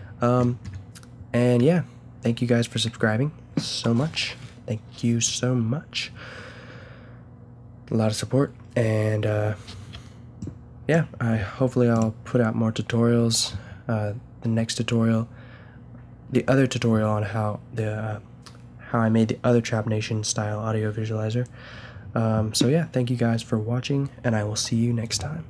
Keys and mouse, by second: 10.4-13.9 drag.